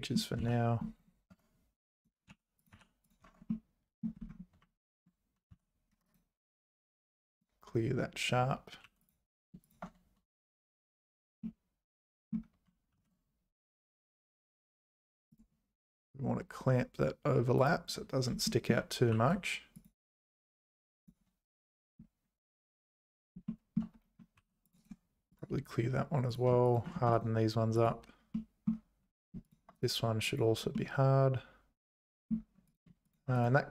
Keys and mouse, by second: 0.0 click, 0.4 z, 1.3 Tab, 2.0 click, 2.3 h, 2.6 click, 2.7 h, 3.2 Tab, 3.5 middle click, 5.5 x, 6.1-7.4 right drag, 8.8 2, 9.6 shift+click, 11.4 middle click, 12.9 ctrl+b, 17.6 click, 18.6 shift+click, 19.1 2, 23.5 shift+click, 24.4 2, 24.7 click, 24.8 right click, 26.3 click, 26.6 shift+click, 27.2 right click, 28.3 middle click, 29.4 shift+click, 29.8 right click, 30.7-32.3 middle drag, 32.7 click, 33.1 shift+click, 33.4 right click.